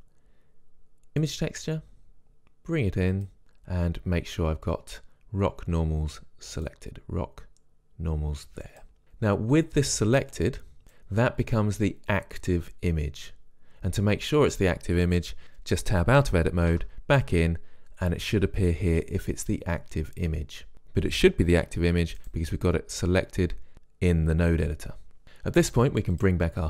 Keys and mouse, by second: 3.4-8.6 drag, 9.8-10.8 drag, 15.4 Tab, 17.0 Tab, 22.5-23.8 drag, 26.5 click.